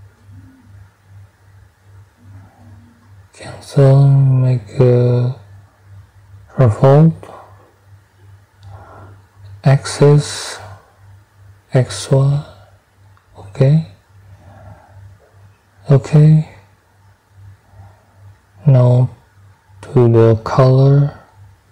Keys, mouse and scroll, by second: 0.9 scroll up 1, 2.5-2.8 scroll up 1, 7.1 middle click, 7.1 scroll, 7.2 click, 9.2 click, 13.4 click, 15.2 click, 18.3 right click, 20.0 click, 21.4 click.